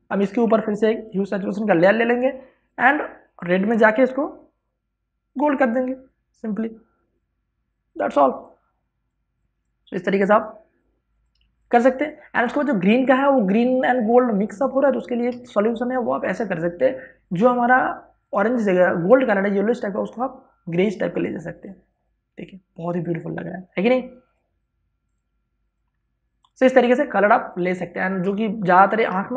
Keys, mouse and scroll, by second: 0.4 scroll up 1, 1.3-11.8 ctrl+drag, 12.1 space, 12.3-27.4 ctrl+drag, 27.4 space, 27.6-29.3 ctrl+drag.